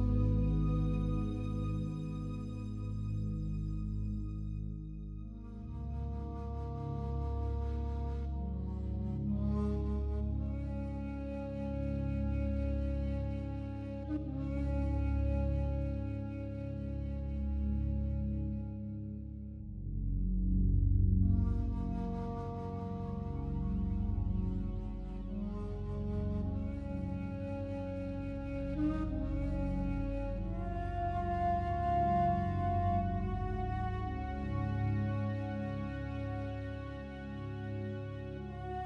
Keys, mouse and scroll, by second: 4.2 click, 5.1 right click, 5.8 shift+right click, 11.2 click, 12.6 shift+right click, 14.8 x, 15.4 click, 17.0 right click, 18.9 2, 21.4 alt+shift+right click, 23.9 click, 27.2 click, 28.4 e, 33.3 right click, 36.4 right click, 38.0 alt+shift+right click.